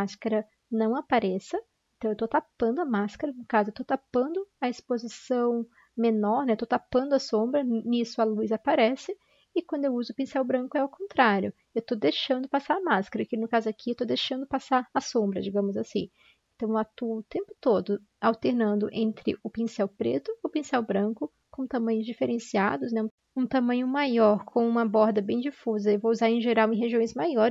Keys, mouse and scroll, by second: 8.6 ctrl+z, 10.9 ctrl+z, 15.1 ctrl+z, 15.2 ctrl+z, 25.3 ctrl+z, 26.1 ctrl+z, 26.9 ctrl+z.